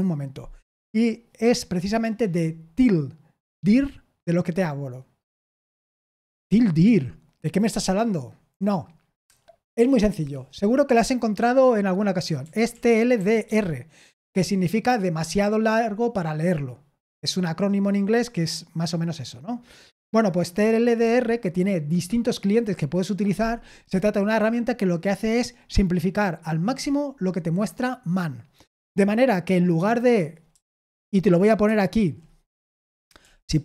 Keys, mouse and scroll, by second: 12.9-13.9 typing, 30.5 BackSpace, 31.1 BackSpace, 31.2 BackSpace, 31.2 BackSpace, 32.9-33.6 typing.